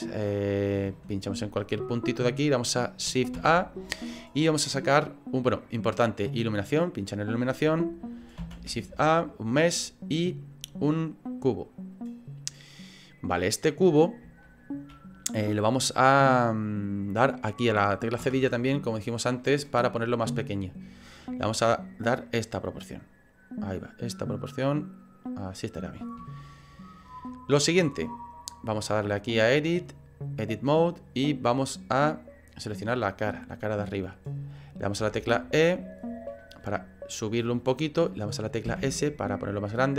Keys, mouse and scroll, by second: 0.9 shift+middle click, 1.8 click, 3.3 shift+a, 6.5 click, 8.4 shift+a, 14.4 shift+middle click, 14.4 scroll up 2, 18.9-19.4 scroll down 2, 18.9 /, 19.4 middle click, 19.4-21.0 scroll down 2, 21.0 click, 22.1 click, 23.8-24.4 scroll up 1, 24.4 click, 24.4-25.1 scroll up 3, 26.4 click, 26.4 shift+middle click, 26.4 scroll up 4, 27.1 scroll up 3, 27.6 scroll down 1, 29.2 click, 29.2-29.9 scroll down 1, 36.4 middle click, 36.4 e, 36.9 middle click, 38.7 s.